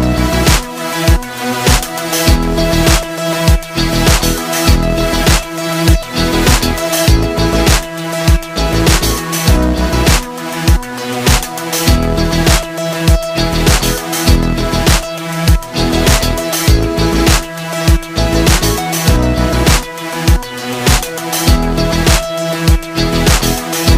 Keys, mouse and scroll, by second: 5.5-19.7 drag.